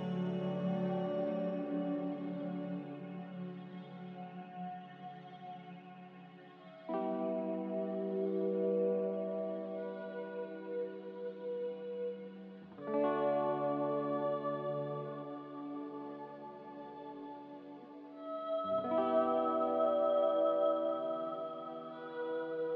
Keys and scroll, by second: 0.1 q, 3.4 q, 12.6 a, 18.7 q.